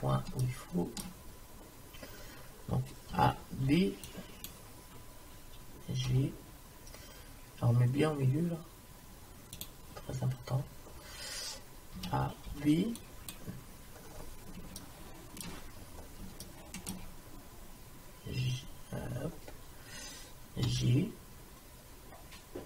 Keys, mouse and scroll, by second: 1.1-3.7 middle drag, 3.2 a, 3.7 b, 6.1 g, 10.1 middle click, 12.0 a, 12.5 b, 12.9-14.0 drag, 14.0 middle click, 15.0 middle click, 20.7 g.